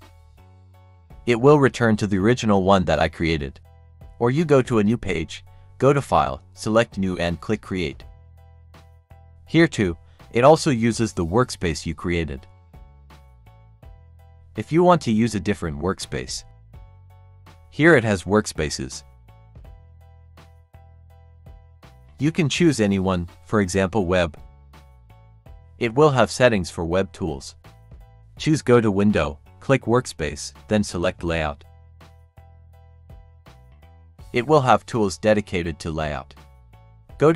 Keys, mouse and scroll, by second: 4.8 click, 7.9 click, 14.9 click, 24.6 click, 28.3 click, 32.5 click, 36.8 click.